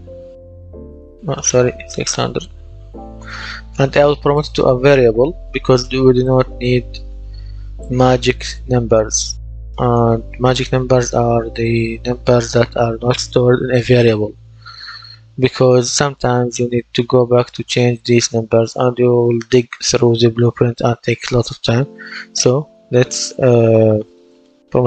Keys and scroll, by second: 0.0-0.1 typing, 0.4 Return, 1.3 BackSpace, 2.0 KP_6, 2.3 KP_0, 3.0 Return.